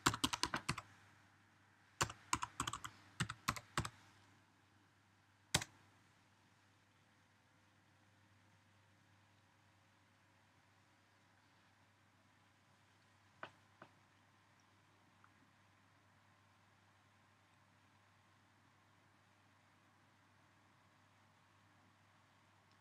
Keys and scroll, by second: 0.0-4.1 typing.